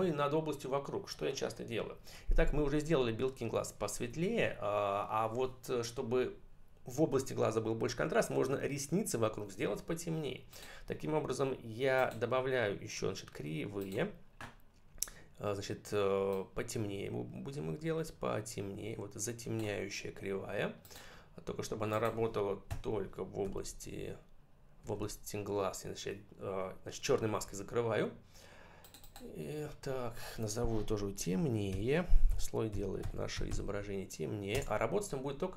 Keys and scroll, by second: 22.5 x, 24.7 ctrl+BackSpace, 31.5 shift+n, 32.1 shift+t, 34.4 Return.